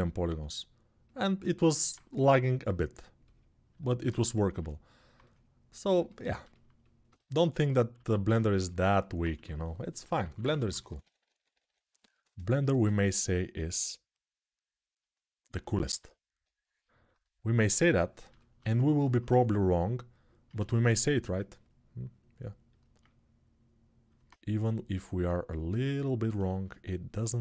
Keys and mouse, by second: 7.8 alt+q, 9.1-11.3 typing, 12.4 shift+r, 16.5 ctrl+r, 18.3-27.4 ctrl+alt+drag, 19.0 1, 20.3 ctrl+z.